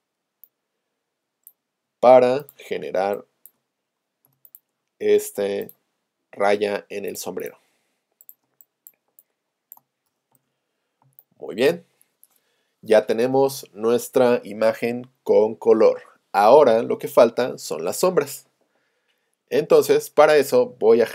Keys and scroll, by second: 8.5 space.